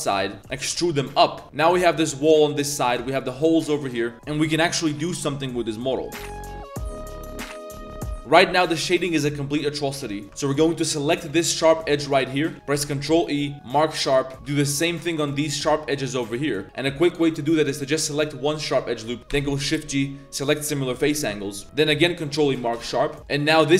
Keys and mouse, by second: 0.4 z, 0.5 e, 0.6 g, 1.8 3, 2.0 alt+click, 2.5 click, 2.8 3, 3.1 alt+click, 3.8 Tab, 3.9 drag, 4.1 a, 8.2 click, 8.5 a, 8.6 shift+click, 8.9 Tab, 8.9 click, 9.7 Tab, 10.2 2, 10.8 alt+click, 11.3 z, 11.7 alt+shift+click, 11.9 drag, 12.7 ctrl+e, 14.3 2, 14.9 alt+shift+drag, 15.5 alt+shift+click, 17.2 alt+click, 17.8 z, 19.3 shift+g, 21.6 ctrl+e, 21.6 z, 23.2 click.